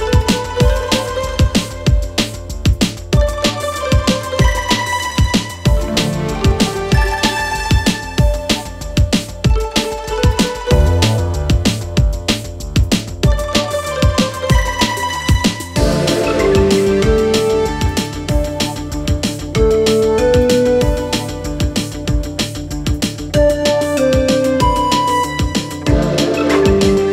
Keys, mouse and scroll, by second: 0.0-1.9 drag, 3.3-5.1 drag, 6.3-7.3 drag, 7.4-8.4 drag, 8.9-11.8 drag, 13.2-14.2 drag, 16.2-17.9 drag, 19.6-22.0 drag, 22.1-23.1 drag, 24.8-25.9 drag, 26.2-27.1 drag.